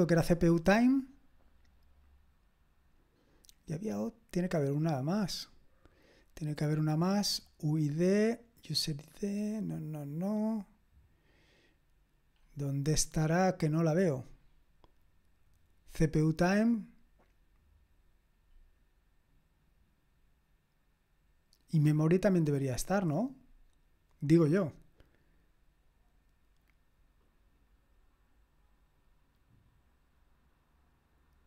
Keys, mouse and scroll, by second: 9.0-10.6 scroll down 1, 10.6-11.7 scroll down 1, 11.7-12.4 scroll down 1, 12.4-13.0 scroll down 1, 13.0-14.4 scroll up 1, 14.4-22.4 scroll up 1, 22.4-23.2 scroll up 1, 23.2-28.0 scroll up 1, 28.0-31.4 scroll up 1.